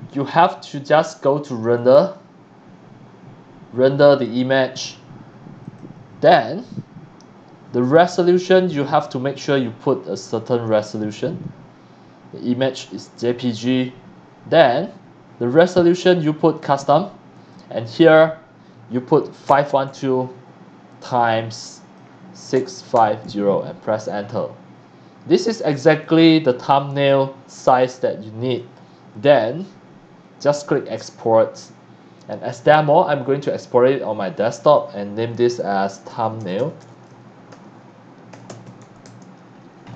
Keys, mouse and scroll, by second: 1.7 click, 4.1 click, 5.6 click, 6.7 scroll down 1, 8.4 middle click, 8.9 click, 14.5 click, 16.6 click, 17.3 click, 17.9 click, 19.5 KP_5, 19.8 KP_2, 21.0 click, 21.7 click, 22.5 KP_6, 22.9 KP_5, 23.2 KP_0, 23.7 KP_Enter, 25.9 x, 26.0 click, 27.0 c, 27.0 click, 27.8 x, 27.9 click, 30.7 click, 32.7 click, 34.5 click, 35.7-39.3 typing, 39.8 scroll up 1.